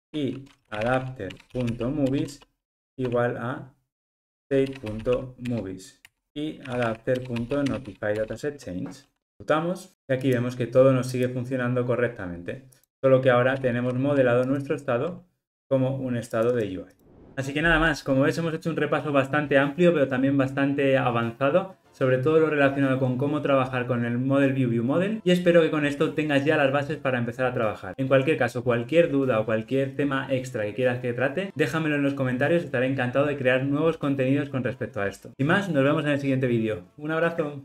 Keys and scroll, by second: 1.3 Return, 9.4 ctrl+r, 14.5 super+b.